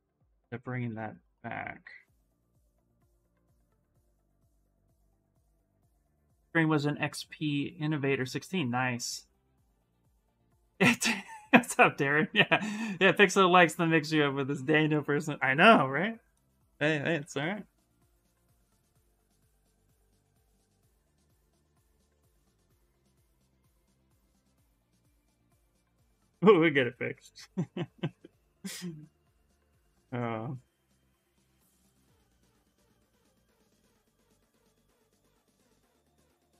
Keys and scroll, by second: 32.3 s.